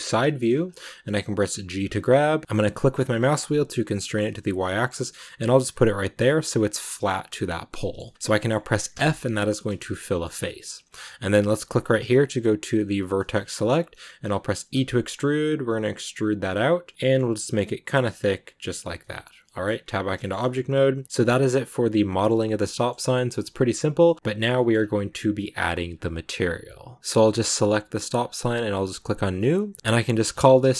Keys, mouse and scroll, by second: 0.1 shift+middle click, 0.2-1.6 scroll up 2, 1.6 g, 7.3 middle click, 8.1 scroll down 2, 8.2 middle click, 8.8 f, 9.6 shift+middle click, 10.3 scroll up 1, 12.8 click, 13.2 middle click, 13.4 scroll up 1, 13.6-14.6 middle drag, 14.6 e, 18.7 scroll down 1, 18.9 middle click, 19.7 scroll down 2, 20.1-22.2 shift+middle drag, 22.2 scroll down 1, 22.3-24.1 shift+middle drag, 24.1-24.6 scroll up 3, 24.4 shift+middle click, 26.9 middle click, 27.0 right click, 27.1 g, 29.0 click.